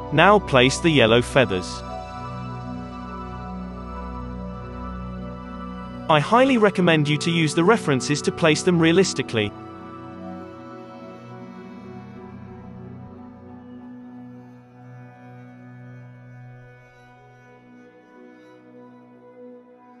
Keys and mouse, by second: 0.1-12.2 typing, 8.6 click, 12.1 alt+a, 12.2 click, 12.4 alt+a, 13.3-14.5 drag, 13.3-20.0 typing, 15.6 click, 16.5 ctrl+z, 16.9-18.4 drag, 17.5 alt+a, 17.8 alt+a, 18.4 middle click, 18.8 alt+a, 19.0-20.0 drag, 19.2 alt+a.